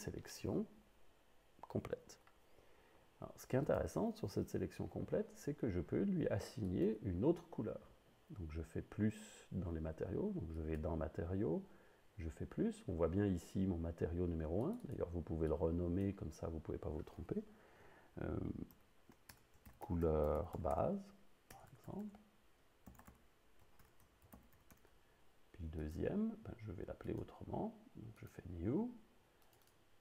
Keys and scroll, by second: 18.7-21.5 typing, 22.9-24.8 typing.